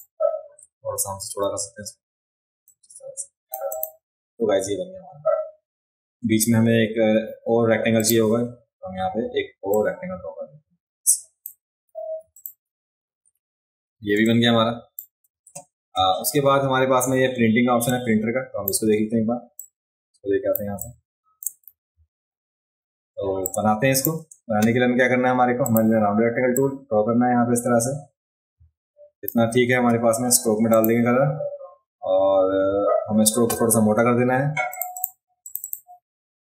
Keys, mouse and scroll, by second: 2.6 click, 3.7 click, 8.0 click, 9.7-11.4 drag, 12.2 v, 12.3 click, 14.1 space, 14.2 click, 17.9 click, 19.6 click, 20.8 click, 20.8 space, 23.4-24.0 drag, 23.5 space, 25.7 click, 26.5-29.3 drag, 30.7 click, 34.7 click, 35.0 click, 35.4 click, 35.6 click.